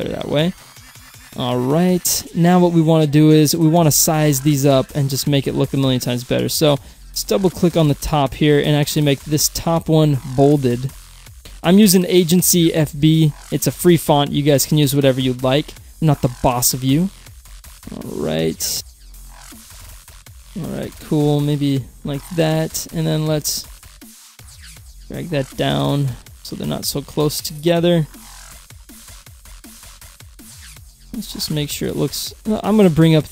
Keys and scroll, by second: 31.5 Down.